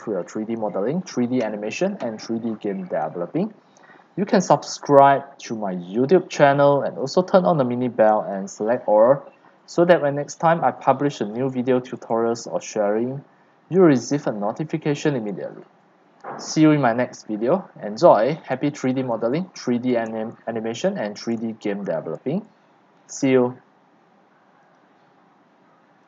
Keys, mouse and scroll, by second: 5.0 click, 6.5 click, 7.3-16.1 typing, 8.6 click, 18.0-21.9 typing, 18.2 click, 23.2 Escape, 24.8 click.